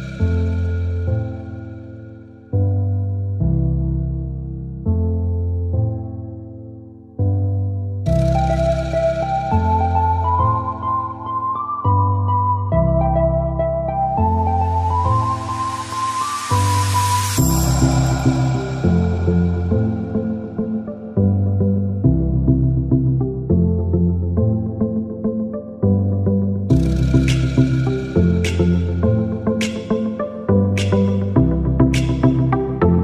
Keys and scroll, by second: 10.1 [, 10.5 [, 10.6 [.